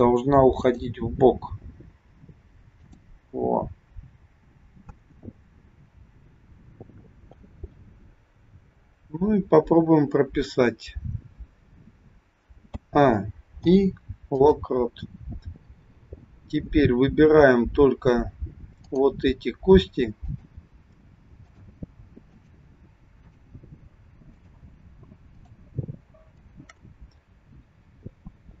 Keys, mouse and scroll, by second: 0.5 click, 1.8 g, 12.6 a, 13.5 i, 15.6-16.6 scroll up 2, 16.6-17.4 scroll up 3, 18.8 click, 20.2-27.2 shift+click, 27.9-28.6 scroll down 1.